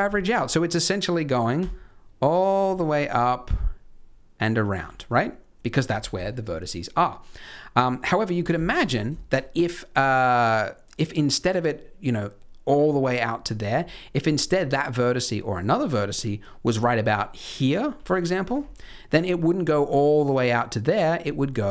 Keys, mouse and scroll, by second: 0.1 shift+middle click, 1.6 d, 1.6 click, 4.8 d, 4.9 middle click, 6.9 middle click, 7.9-8.4 scroll down 1, 8.4 scroll up 1, 8.6 shift+middle click, 9.3 middle click, 13.4 scroll down 1, 13.7 scroll up 2, 18.0 click, 18.0 d, 18.5 d, 18.7-20.9 scroll down 1, 18.7 d, 20.9 scroll down 1, 21.2 d, 21.5 click.